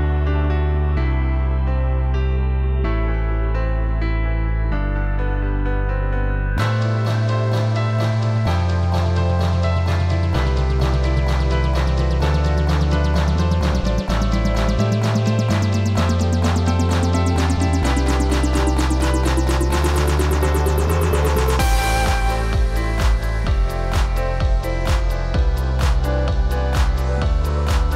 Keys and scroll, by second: 18.6 v, 19.5 ctrl+t, 26.5 a.